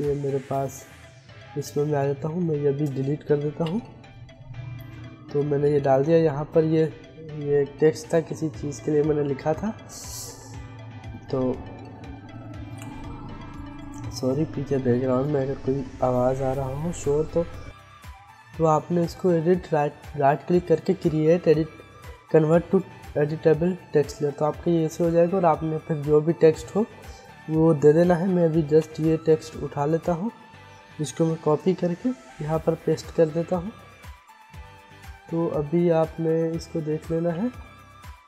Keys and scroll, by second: 3.0 Delete, 28.4 Delete, 30.9 ctrl+c, 31.7 ctrl+v, 36.5 ctrl+z.